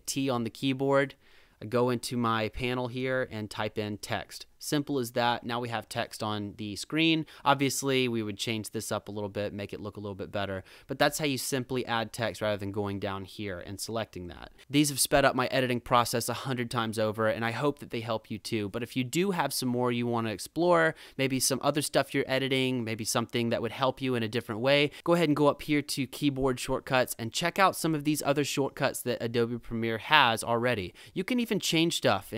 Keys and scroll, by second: 0.0 t, 3.0-4.4 typing.